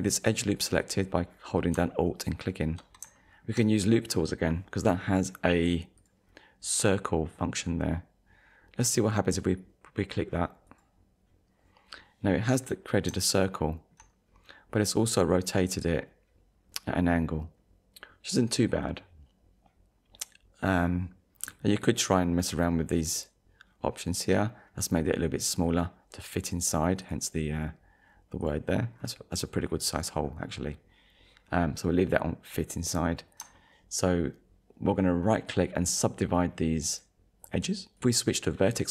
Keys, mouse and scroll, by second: 0.3 scroll up 1, 3.2 shift+middle click, 5.0 right click, 6.0 click, 10.7 click, 12.7 scroll down 1, 13.5 shift+middle click, 14.4 scroll up 1, 22.0 click, 23.1 click, 27.0 click, 28.4 click, 29.0 scroll down 1, 29.5 scroll down 1, 30.2-31.0 scroll up 2, 32.8 scroll up 1, 33.6 shift+middle click, 35.2 right click, 38.0 click.